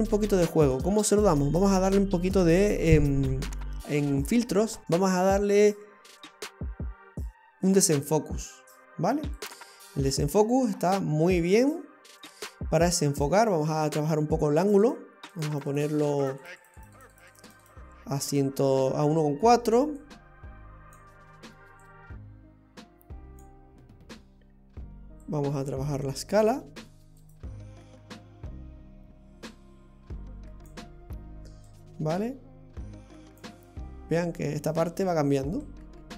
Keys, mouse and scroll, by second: 1.3 scroll up 3, 2.4 shift+a, 10.4-11.7 scroll up 4, 11.7 middle click, 12.5-13.7 scroll up 3, 14.7 click, 14.9 click, 15.3 click, 15.6 click, 15.8 click, 16.2 click, 16.5 click, 16.7 click, 16.8-17.7 click, 17.1 click, 17.2 click, 20.0 click, 21.8 click, 25.2 click, 27.3 click, 29.5 click, 31.7 click, 35.7 click.